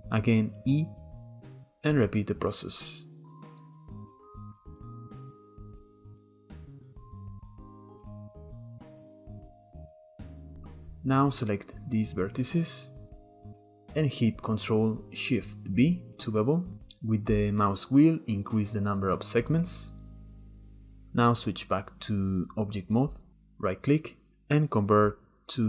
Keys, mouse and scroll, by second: 0.5 e, 2.9 click, 3.7 click, 4.4 click, 4.6 shift+middle click, 5.4 e, 5.7 click, 6.6-7.3 middle drag, 7.6 KP_7, 8.0 click, 8.3 e, 9.1 e, 9.4 click, 9.8 middle click, 9.9 Tab, 10.3 click, 10.8 shift+click, 11.2 shift+middle click, 12.1 shift+click, 12.5 shift+click, 13.2 shift+middle click, 13.5 Tab, 14.4 ctrl+shift+b, 21.0 Tab, 23.6-25.6 right drag.